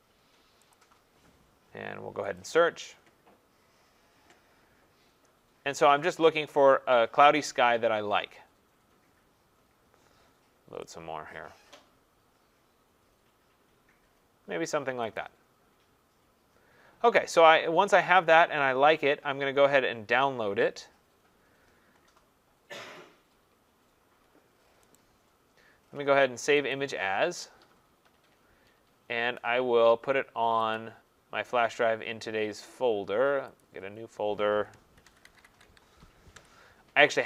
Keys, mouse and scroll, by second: 0.8 click, 1.3-2.1 typing, 2.4 click, 4.9-6.7 scroll, 7.8-8.3 scroll, 8.8-10.0 scroll, 10.9 click, 11.4-12.4 scroll down 15, 13.1 scroll down 2, 13.6 scroll, 15.2 click, 17.8-18.2 scroll, 20.0-20.3 scroll, 20.8-21.5 scroll, 21.5 scroll down 7, 22.5 scroll down 1, 25.0 right click, 25.0-25.5 scroll, 26.7 click, 29.3 scroll, 30.7 click, 33.6 click, 34.7-36.4 typing.